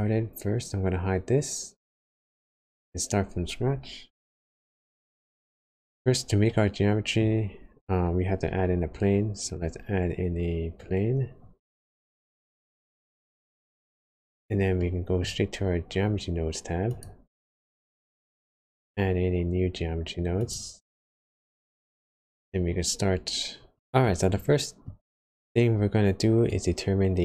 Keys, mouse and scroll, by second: 6.7 scroll down 1, 7.3 scroll up 1, 9.1 scroll up 2, 10.1 scroll down 3, 10.3 scroll down 2, 10.6 scroll up 2, 11.4 shift+a, 14.9 middle click, 24.3 shift+middle click, 26.4 click.